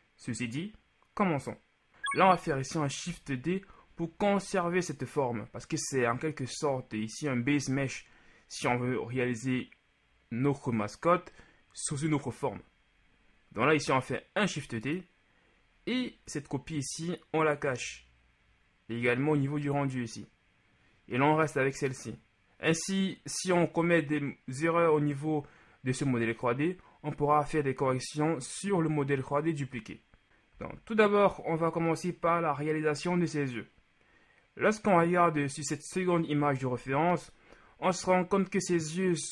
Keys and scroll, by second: 3.1 shift+d, 30.6 z.